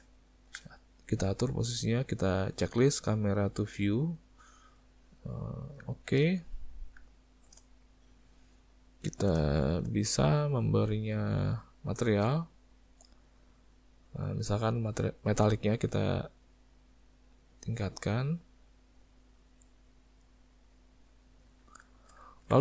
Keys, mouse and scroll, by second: 0.2 ctrl+middle click, 4.0 click, 4.5 middle click, 5.3 middle click, 5.9 shift+middle click, 6.3 middle click, 7.1 shift+middle click, 7.7 middle click, 9.5 shift+middle click, 10.4 click, 12.2 click, 13.0 click, 15.5 click, 18.4 click, 21.5 alt+a, 21.9 shift+middle click, 22.3 ctrl+middle click.